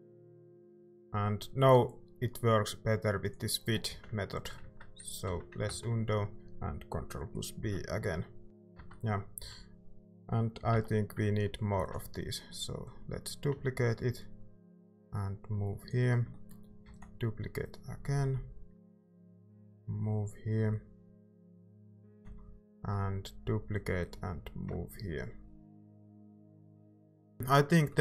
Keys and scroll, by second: 3.9 z, 5.2 z, 7.6 ctrl+b, 8.4 Tab, 8.4 ctrl+s, 8.4-10.7 typing, 8.8 Tab, 11.7 d, 16.8 d, 22.0 d.